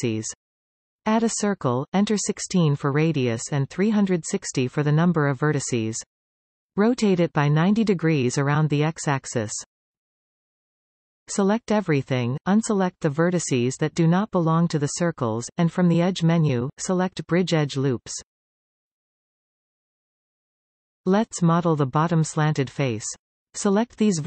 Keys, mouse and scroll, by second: 0.2 shift+a, 3.0-7.4 drag, 10.0 r, 12.3 a, 13.1 b, 15.8 b, 17.7-20.9 drag, 20.9-21.7 scroll down 2, 21.7 middle click, 22.4-22.8 scroll up 1, 22.8-24.2 middle drag.